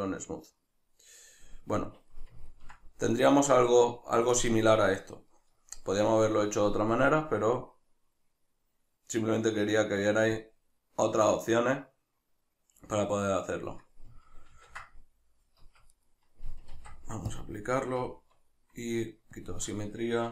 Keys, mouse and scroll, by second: 2.1-6.9 middle drag, 6.9-16.0 drag, 15.8 Escape, 16.0 right click, 16.8 ctrl+a, 18.0 Tab, 19.4-20.3 drag.